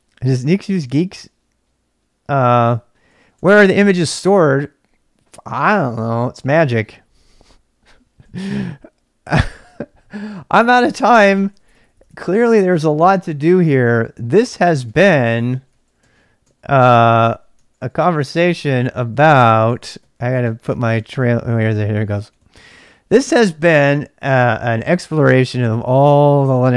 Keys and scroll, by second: 2.7-4.6 typing, 11.0-12.0 typing, 13.7 ctrl+[, 13.8-22.8 typing.